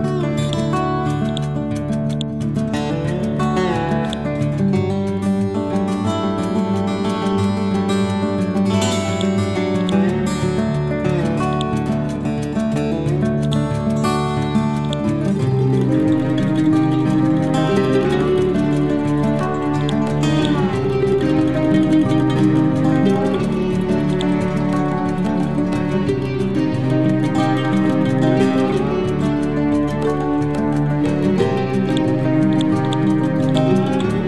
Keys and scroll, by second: 24.3 Down, 30.6 Right.